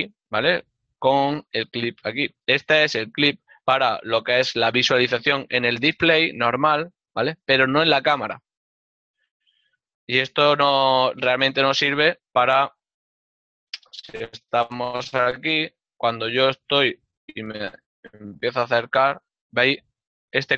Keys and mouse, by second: 11.9 n, 14.7 middle click.